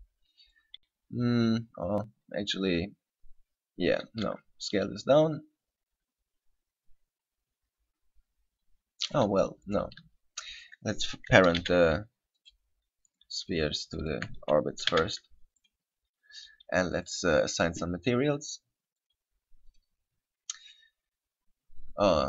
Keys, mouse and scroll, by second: 0.8 right click, 4.4 s, 9.3 right click, 9.8 right click, 10.8 shift+right click, 11.8 ctrl+p, 13.3 right click, 14.2 shift+right click, 15.1 ctrl+p, 17.2 right click, 19.2 click, 19.9 click.